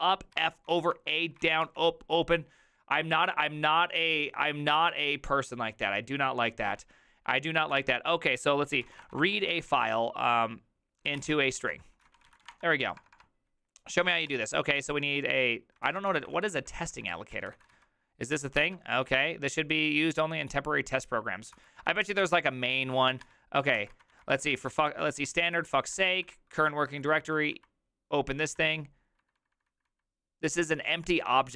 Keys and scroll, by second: 0.0-1.6 typing, 1.4 ctrl+c, 7.2 Return, 7.6-18.2 typing, 18.6 ctrl+c, 21.5 ctrl+c, 22.0-29.7 typing, 31.4-31.5 typing.